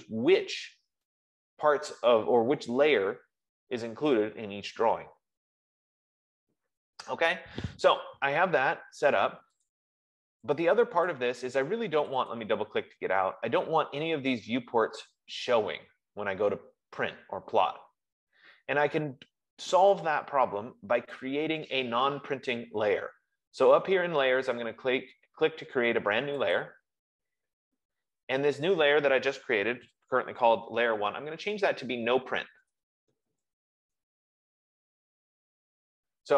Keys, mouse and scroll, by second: 10.0 click, 11.5 click, 12.4 click, 12.6 click, 27.1 click, 32.0-34.7 typing.